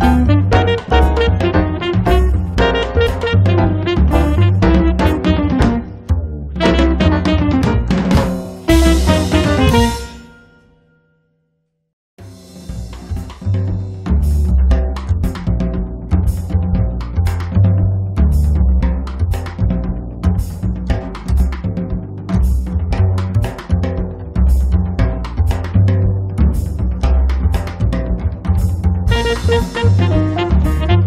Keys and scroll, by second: 2.8 e, 5.3 p, 7.4 5, 7.8 Return, 9.2 space, 10.5 m, 11.6 Up, 13.0 Up, 14.8-18.1 typing, 15.0 Return, 22.0 r, 25.3 p, 28.8 5, 29.1 Return, 29.5 space, 30.9 m.